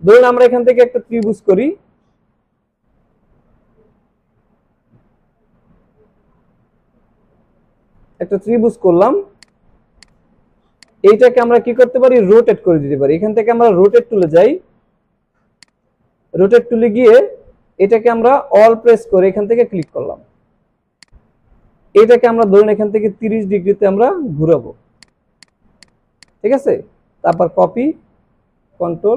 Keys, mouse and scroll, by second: 0.4-4.2 drag, 2.5 Down, 9.4 click, 10.4 alt+scroll up 1, 10.8 click, 11.4 click, 14.2 right click, 14.3 right click, 15.7 click, 19.1 click, 21.0-21.6 drag, 25.0 click, 25.8 click, 27.3 click, 28.9 ctrl+d.